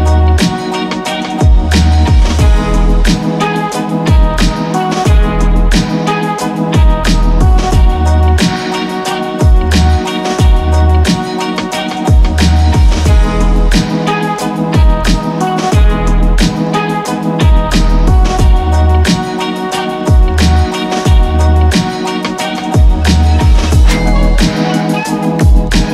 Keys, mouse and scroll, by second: 2.5-3.2 typing, 4.0 ctrl+space, 4.8-6.6 typing, 7.6-8.3 typing, 7.8 click, 11.5-12.2 typing, 12.8 click, 15.2 ctrl+space, 15.8-17.5 typing, 22.2 scroll up 1, 22.9-24.7 middle drag, 24.7 click.